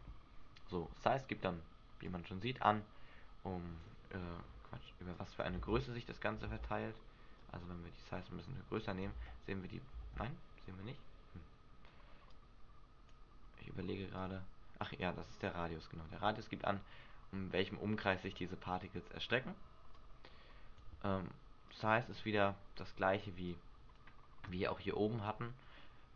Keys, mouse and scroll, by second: 2.2 click, 5.3 click, 5.8 alt+a, 6.6 alt+a, 7.6 click, 8.9 click, 9.3 alt+a, 10.2 alt+a, 12.5 click, 14.3 click, 20.1 click, 21.8 click, 23.7 click, 25.4-25.8 scroll up 3, 25.8 scroll down 1.